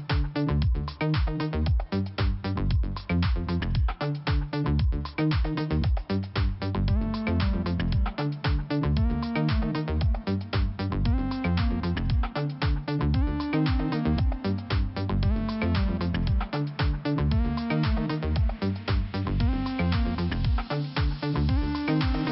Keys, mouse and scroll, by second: 1.1 space, 3.3 click, 4.7 click, 6.1 click, 8.5 scroll up 2, 13.4 click, 14.5 click, 15.3 right click, 16.1 click, 19.7 click, 19.8 click.